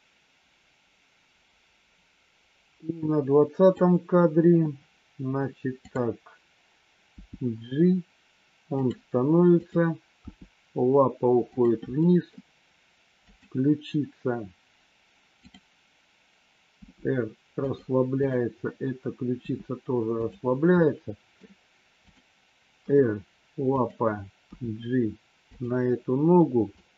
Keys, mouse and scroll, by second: 7.1 g, 12.0 middle click, 15.4 click, 16.7 r, 19.4 r, 20.7 middle click, 22.7 r, 24.5 g, 26.4 middle click.